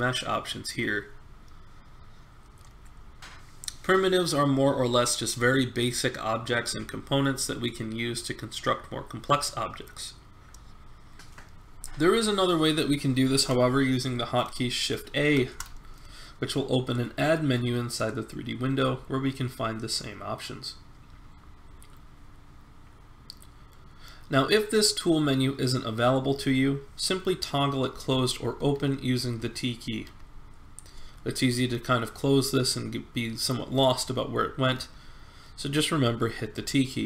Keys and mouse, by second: 15.1 shift+a, 28.6 t, 30.0 t, 31.5 t, 35.5 t, 36.5-37.0 t.